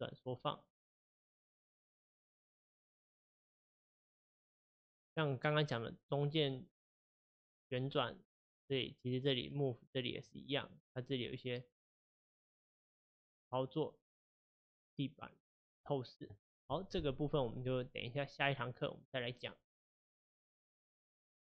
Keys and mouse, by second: 0.8 click, 6.0-9.0 middle drag, 9.0-12.9 drag, 14.6 click, 15.4 click.